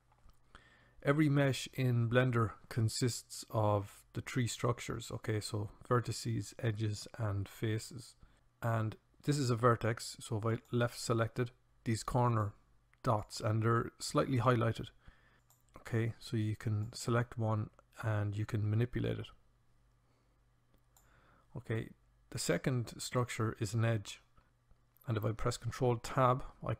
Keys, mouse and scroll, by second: 10.4 click, 11.5-14.1 drag, 15.3-21.0 drag, 25.5 ctrl+Tab.